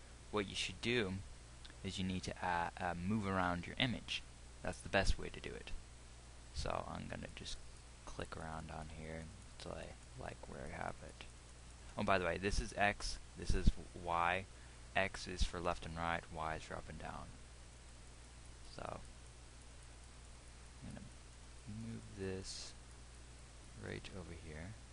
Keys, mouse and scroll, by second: 12.4-24.9 drag.